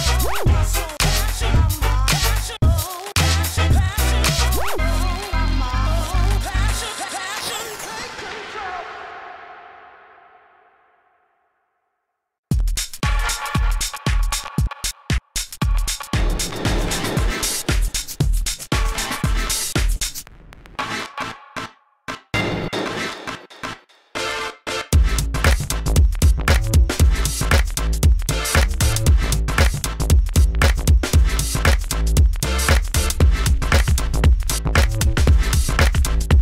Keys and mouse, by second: 1.6 f, 2.6 f, 4.7 f, 5.0 f, 7.9 KP_1, 8.5 ctrl+s, 9.6 s, 9.8 f, 10.4 f, 11.7 ctrl+z, 12.2 ctrl+z, 14.2 ctrl+z, 15.2 ctrl+z, 16.4 f, 17.3 ctrl+z, 18.8 s, 20.1 s, 20.2 f, 21.0 s, 21.7 ctrl+z, 22.4 ctrl+z, 22.8 ctrl+z, 23.0 f, 26.8 s, 27.3 s, 27.4 f, 27.6 f, 27.8-29.2 drag, 30.0 f.